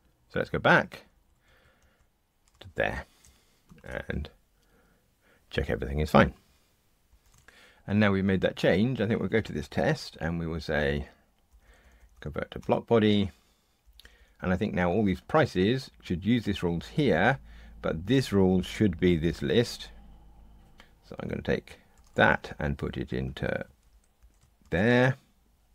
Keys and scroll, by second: 0.7 super+z, 1.4 super+z, 3.6 ctrl+r, 9.9 alt+Return, 21.9 super+c, 24.6 super+v.